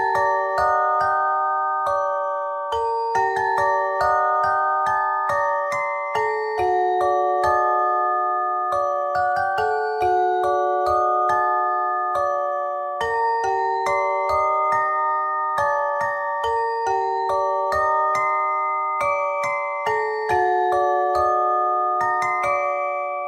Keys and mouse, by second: 1.6 ctrl+Tab, 2.0 click, 2.8 c, 4.5 r, 6.2 c, 8.8 Tab, 9.1 z, 10.9 Tab, 11.4 click, 17.2 Tab, 17.9 Tab, 18.4 KP_3, 19.3 z, 19.7 c, 20.9 r, 22.6 z.